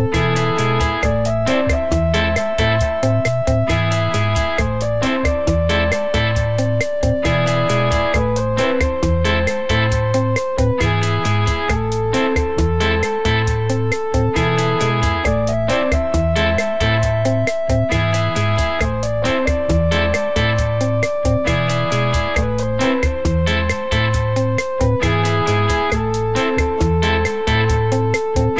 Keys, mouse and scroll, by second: 0.2 middle click, 1.6 click, 2.0 click, 3.4 click, 3.7 click, 15.3 middle click, 15.3 click, 15.9 click, 17.2 click, 22.3-23.0 scroll down 1, 23.0 click, 24.3 click, 25.2 click.